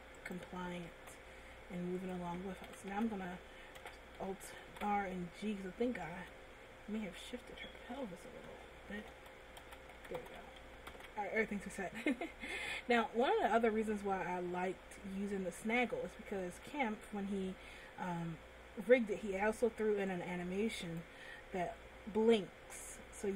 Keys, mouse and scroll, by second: 0.6 right click, 1.4 r, 2.9 a, 3.1 a, 4.3 alt+r, 7.2 alt+g, 7.2 a, 8.3 a, 9.7 alt+g, 10.1 alt+g, 10.5 alt+g, 11.0 alt+g, 11.4 alt+r, 11.9 middle click, 13.0 scroll up 1, 14.1 middle click, 16.7 a, 17.8 middle click, 18.8 scroll down 1, 20.3 click, 22.9 click.